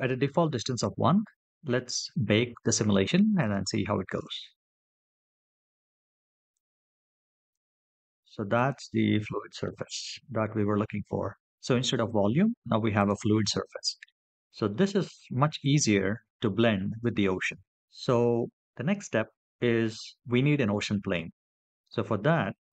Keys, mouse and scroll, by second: 3.2 click, 6.3 click, 7.4 click, 7.8 click, 8.3 click, 9.4 middle click, 10.1 scroll up 2, 10.5-11.6 middle drag, 12.8 click, 13.8-14.2 shift+middle drag, 14.5-14.9 middle drag, 15.2 scroll down 2, 17.7 middle click.